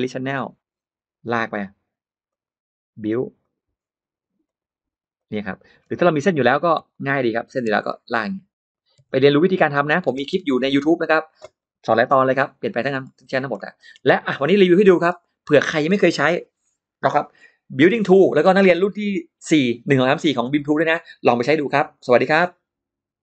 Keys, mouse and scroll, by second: 0.2 click, 1.0 click, 2.1 click, 3.2 click, 4.3 click, 5.0 click, 5.7 middle click, 5.7 space, 6.1 middle click, 6.6 l, 6.7 click, 7.3 click, 7.3 l, 7.5 l, 8.0 click, 8.6 click, 8.8 l, 9.1 click, 9.8 click, 10.0 space, 10.3 click, 12.2 click, 12.8-13.8 scroll down 3, 13.4 middle click, 13.8-14.2 scroll up 1, 14.6 middle click.